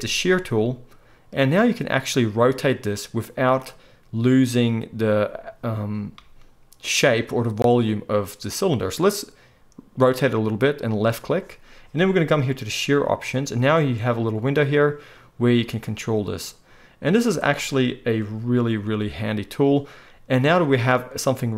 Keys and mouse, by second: 13.0-21.5 drag.